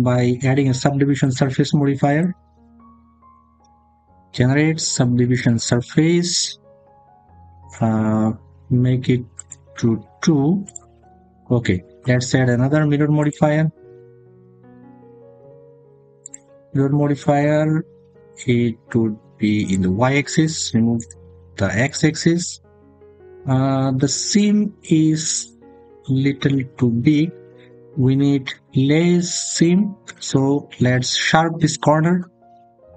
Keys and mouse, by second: 1.0 click, 2.0-5.4 drag, 9.2 click, 13.0-16.2 drag, 19.5 click, 20.8 click, 22.1 middle click.